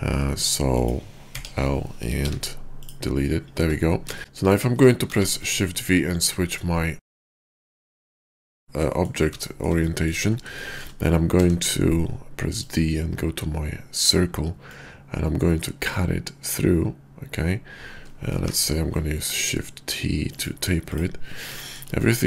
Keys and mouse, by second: 0.6 click, 1.2 l, 2.2 x, 3.6 Tab, 4.1 shift+click, 4.2 KP_5, 4.9 shift+v, 8.8-9.1 drag, 9.4 shift+drag, 9.8 click, 11.2 d, 14.6-15.8 drag, 18.5 shift+t, 20.3 click, 20.9 click, 21.6 shift+drag, 22.0-22.2 middle drag.